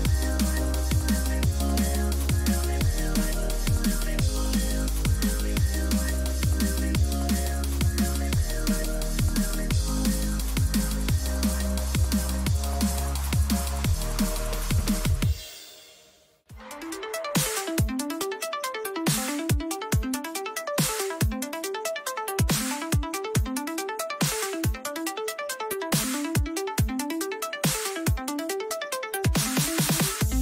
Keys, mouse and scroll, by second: 3.5-7.4 middle drag, 7.4-10.7 drag, 9.0 k, 12.1-15.8 middle drag, 17.4 a, 21.6-26.6 middle drag, 25.9 KP_3, 26.6 z, 28.9 a, 29.2 a.